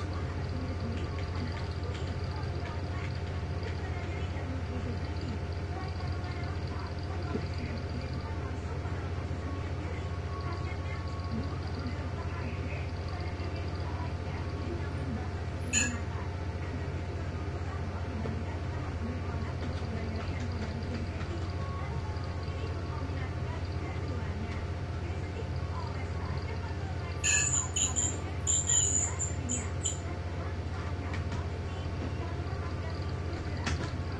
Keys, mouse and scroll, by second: 0.5 ctrl+shift+d, 1.0 shift+Down, 5.9 shift+click, 6.7 click, 8.9 click, 13.6 click, 17.2 click, 19.5-22.0 typing, 24.8 shift+click, 28.4 click, 31.2 space, 33.5-34.1 typing.